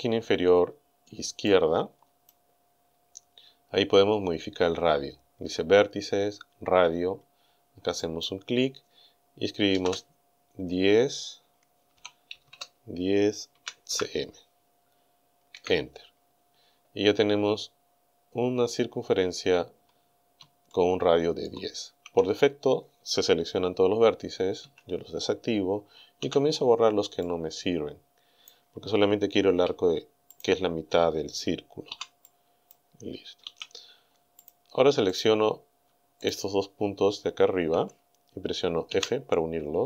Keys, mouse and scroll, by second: 1.5 click, 8.0 click, 9.7 KP_1, 9.8 KP_0, 12.0 Num_Lock, 12.4 KP_1, 12.5 KP_0, 13.6 c, 13.9 m, 15.5 KP_Enter, 17.9-18.4 scroll up 2, 18.7-19.0 scroll up 2, 19.5-19.8 scroll up 2, 20.7 shift+middle click, 24.7 a, 26.2 b, 27.3-28.7 drag, 29.5 Delete, 30.4 click, 31.9 b, 32.3 click, 33.5 Delete, 34.5 click, 35.1 right click, 36.3 shift+right click, 38.9 f.